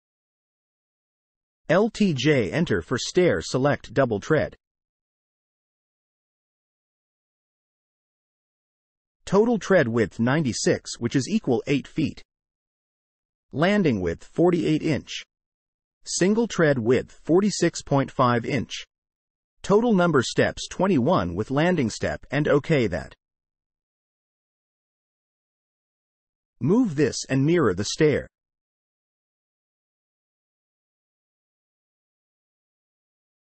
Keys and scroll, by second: 1.2 l, 1.8 j, 30.2 space.